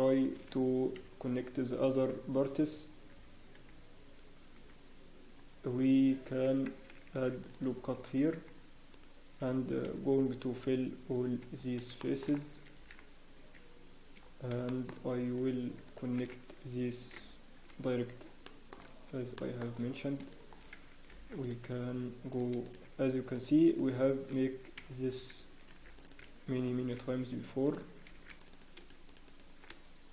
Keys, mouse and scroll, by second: 0.0 shift+middle click, 0.9-2.0 scroll up 1, 0.9 f, 5.6-6.2 scroll down 2, 6.2-6.5 scroll up 1, 7.1 ctrl+r, 7.1 scroll down 2, 8.0 click, 8.9 shift+click, 8.9-9.4 scroll up 2, 9.8 f, 10.5 scroll down 1, 10.5 f, 11.2 scroll up 1, 11.6 scroll down 4, 12.0 shift+middle click, 12.6 ctrl+r, 12.6 scroll up 1, 14.2 scroll up 1, 14.6 shift+middle click, 15.0-15.7 scroll up 4, 15.3 click, 15.8 shift+click, 17.1 f, 17.5 scroll down 1, 18.4 shift+middle click, 18.7 scroll down 6, 19.3 shift+middle click, 19.6 scroll up 2, 20.2 click, 20.2 scroll up 3, 20.5 scroll down 1, 21.1 ctrl+r, 22.6 click, 22.6 scroll down 3, 23.3 shift+click, 24.1 shift+click, 25.0 scroll up 1, 25.7 ctrl+r, 26.7 ctrl+r, 28.1 ctrl+r, 28.1 scroll up 2, 28.8 click, 29.6 shift+click.